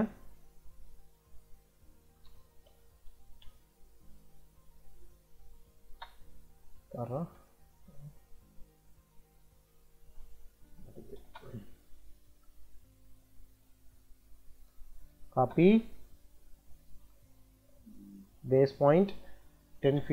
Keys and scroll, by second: 1.7-3.0 typing, 3.3 Return, 4.9 Escape, 5.7 space, 6.5 Escape, 10.9 e, 11.0 space, 14.5 c, 15.2 space, 19.4-20.1 typing.